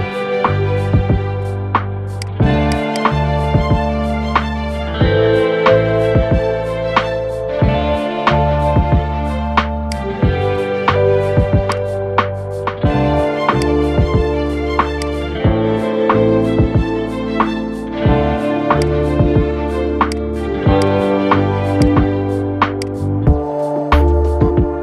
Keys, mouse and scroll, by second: 0.1-1.9 middle drag, 1.9 click, 2.4 alt+shift+click, 2.6 alt+shift+click, 3.6-8.9 middle drag, 8.9 scroll up 1, 9.6 shift+click, 10.8-11.4 middle drag, 11.4 shift+click, 12.3-13.3 middle drag, 13.3 shift+click, 14.7 shift+click, 15.4-16.7 middle drag, 16.7-17.0 scroll up 3, 17.4-17.8 scroll up 7, 18.5-21.6 drag, 24.2-24.8 middle drag.